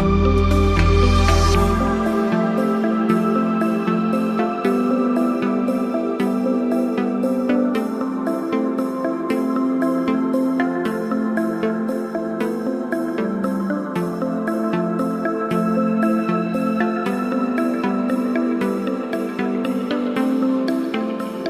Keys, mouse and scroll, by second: 2.6 click, 4.1-9.4 drag, 8.5 click, 11.7-12.3 alt+click, 15.7 click, 16.6 ctrl+-, 17.6 click, 20.5 click.